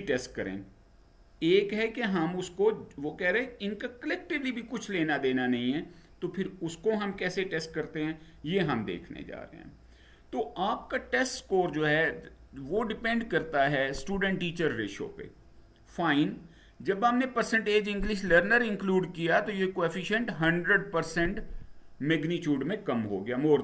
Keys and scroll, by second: 8.4 Down.